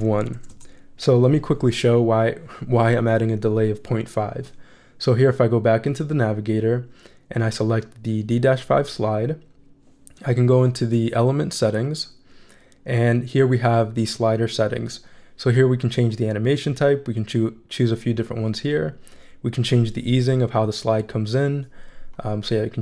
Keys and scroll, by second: 0.3 1, 0.5 Return.